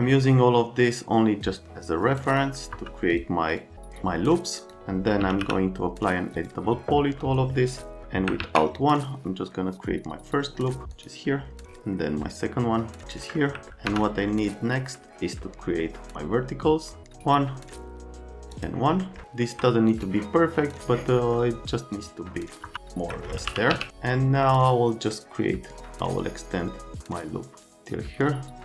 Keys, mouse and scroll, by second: 0.2 middle click, 1.6 click, 2.7 F3, 3.1 click, 3.5 click, 4.6 click, 5.0-5.8 typing, 6.3 click, 7.2 right click, 8.4 alt+1, 10.9 click, 13.3 middle click, 19.9 right click, 20.8 click, 21.2 middle click, 22.7 alt+middle click, 23.2-24.2 typing.